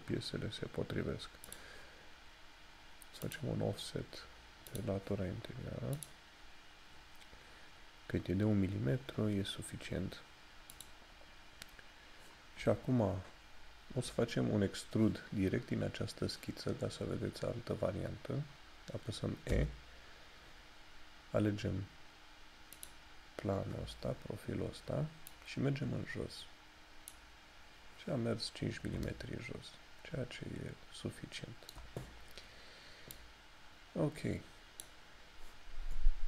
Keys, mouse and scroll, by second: 19.6 e, 22.9 click, 28.7 scroll up 1, 29.1 shift+middle click, 33.2 click.